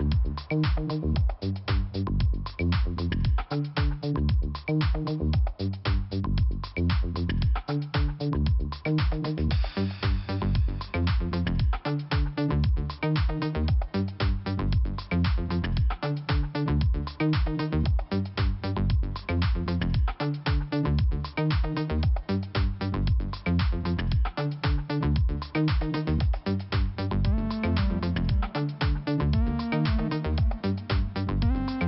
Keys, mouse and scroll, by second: 1.9 click, 2.0 click, 2.1 click, 2.8 click, 4.1 click, 4.6 click, 5.9 click, 8.8 click, 12.2 ctrl+Delete, 13.1 click, 18.2 scroll up 2, 21.5 click, 23.1 click, 24.5 click, 26.0 click, 29.8 click, 31.5 click.